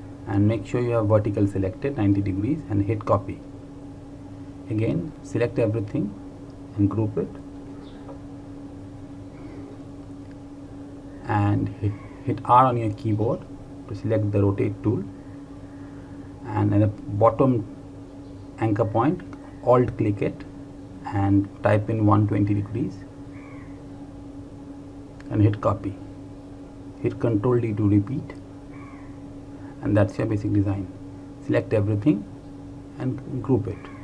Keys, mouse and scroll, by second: 3.2 click, 9.6 ctrl+Num_Lock, 10.2 ctrl+g, 14.9 r, 20.0 alt+click, 23.4 KP_1, 23.7 KP_2, 24.1 KP_0, 26.0 click, 28.5 ctrl+d, 30.4 click, 32.4 ctrl+a, 33.9 ctrl+g.